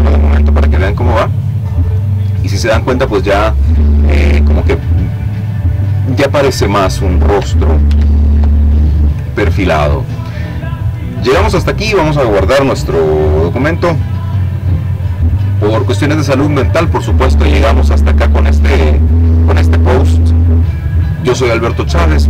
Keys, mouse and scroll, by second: 6.1 ctrl+z, 9.5 click, 13.9-15.4 drag.